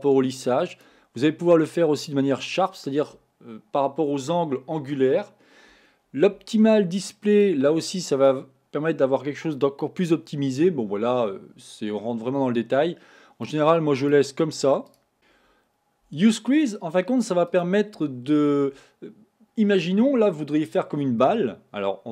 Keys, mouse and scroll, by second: 1.0-3.8 drag, 7.4 click, 13.6 click, 14.1-15.1 drag, 15.1 middle click, 15.2-16.1 scroll up 1, 16.7 click, 21.3-22.1 middle drag.